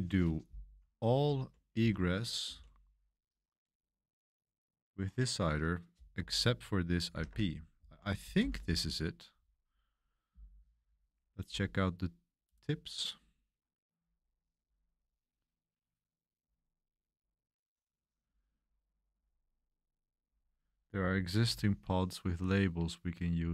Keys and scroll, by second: 0.0-3.1 typing, 1.8 Escape, 5.9-9.8 typing.